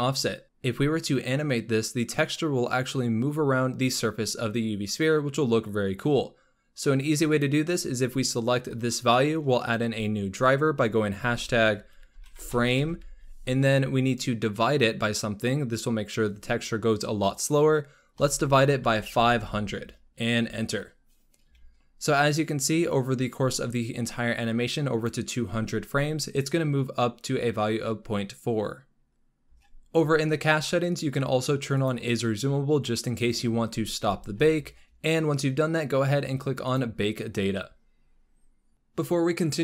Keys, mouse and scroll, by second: 7.2-10.3 drag, 19.3 0, 22.7-25.6 drag, 29.2-29.7 scroll down 16, 31.7 click, 33.6-35.6 scroll up 16, 36.5-38.7 drag.